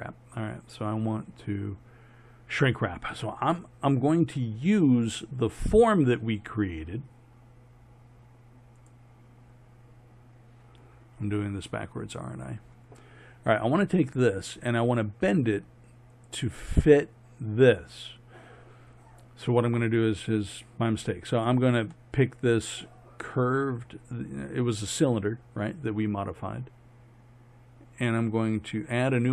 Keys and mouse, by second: 0.6-9.0 drag, 9.5-12.0 middle drag, 12.0-14.6 drag, 14.6-16.2 middle drag, 16.2-19.9 right drag, 22.0-29.3 middle drag.